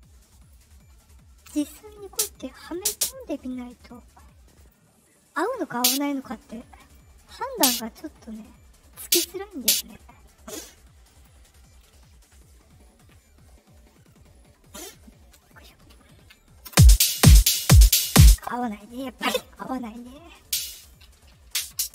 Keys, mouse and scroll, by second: 2.0 click, 2.7 click, 3.7 right click, 4.5 click, 5.6 click, 6.4 click, 7.4 click, 8.9 click, 9.5 click, 11.0 click, 13.1 middle click, 13.1-13.4 scroll up 2, 14.9 right click, 16.6 space, 18.1 space, 20.3 click, 21.0 KP_4.